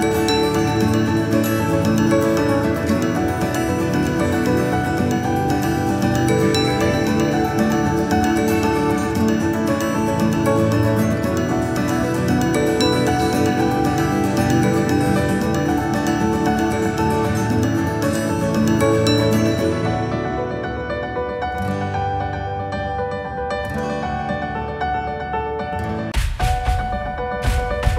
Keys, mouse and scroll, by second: 4.4 click, 6.3 g, 8.1-9.7 drag, 10.6-12.2 drag, 12.7 click, 16.1 Delete, 18.2-19.7 drag, 20.0 click, 21.0-22.5 right drag, 23.8 g.